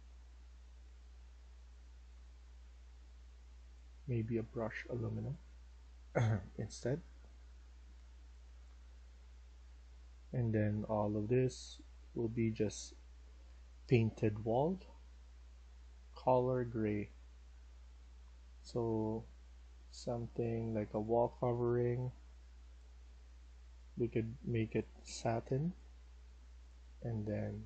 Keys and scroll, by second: 9.2 w, 9.7 s.